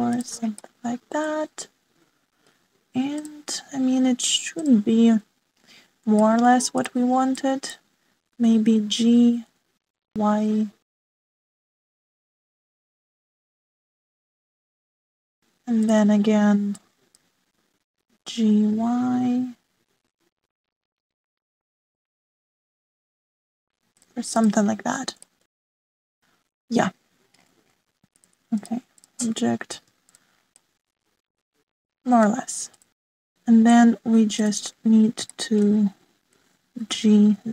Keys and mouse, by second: 1.7-3.2 middle drag, 3.2 click, 5.5 click, 7.1 shift+click, 7.7 click, 8.2 click, 9.3 g, 15.5 middle click, 16.8 click, 17.8 click, 19.0 g, 26.2 shift+middle click, 29.2-29.6 drag, 30.7 alt+z, 31.0 click, 31.6-33.4 middle drag, 33.7 click, 35.3 click, 36.3-36.6 shift+middle drag.